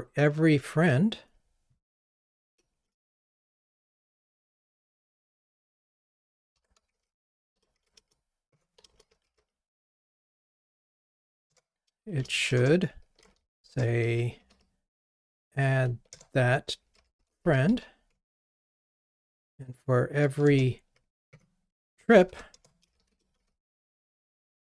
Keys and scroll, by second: 11.5 Return.